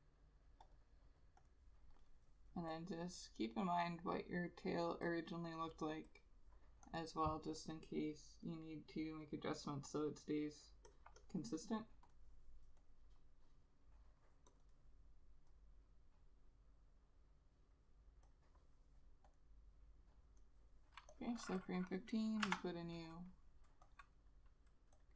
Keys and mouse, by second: 7.8 double click, 24.1 F6.